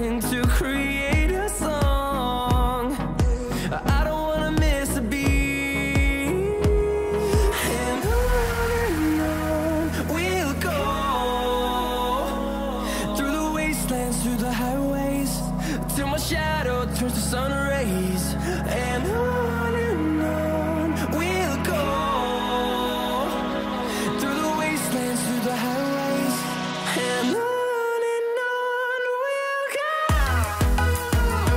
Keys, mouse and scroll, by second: 0.0-0.7 scroll up 1, 1.6 right click, 2.2 click, 3.0-3.7 scroll up 1, 4.1-6.2 scroll down 1, 6.3 click, 11.3 click, 11.4-14.3 drag, 30.3 click.